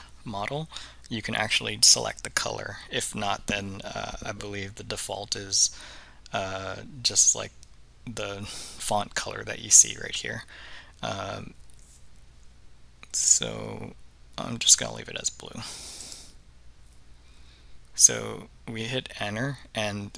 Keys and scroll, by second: 16.1 Return.